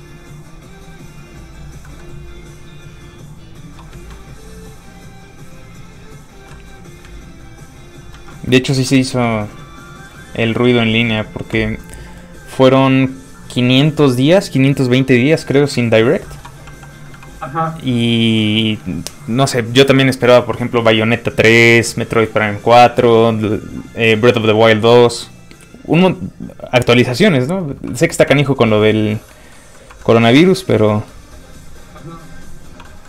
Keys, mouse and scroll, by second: 0.6 click, 1.8 middle click, 2.4 click, 4.7 click, 7.1 ctrl+click, 8.1 ctrl+z, 8.6 middle click, 8.7 f, 8.8 click, 9.3 ctrl+click, 10.6 ctrl+z, 11.1 click, 15.7 middle click, 15.9 shift+middle click, 16.6 shift+f, 16.8 click, 28.8 middle click, 29.8 shift+middle click, 31.0 shift+middle click, 31.6 click, 32.8 middle click.